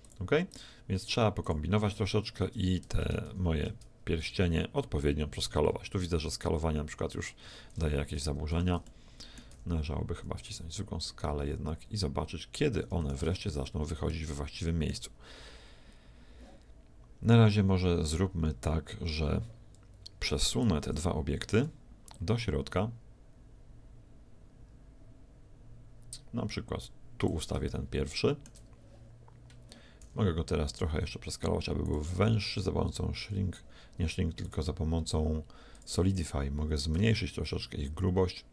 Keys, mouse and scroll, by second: 2.8 s, 7.6 shift+z, 8.5 Escape, 8.9-10.6 middle drag, 9.6 s, 13.7-15.6 middle drag, 20.8 KP_1, 22.1-24.0 drag, 27.8-29.6 middle drag, 30.0 s, 34.4-38.5 drag.